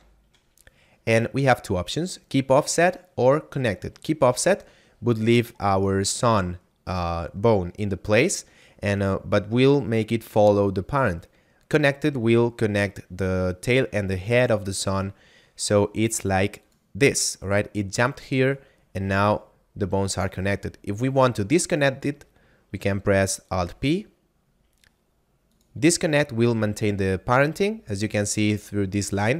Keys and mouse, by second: 16.5 click, 18.5 right click, 21.6 right click, 23.6 alt+p, 25.5 click, 26.3 right click.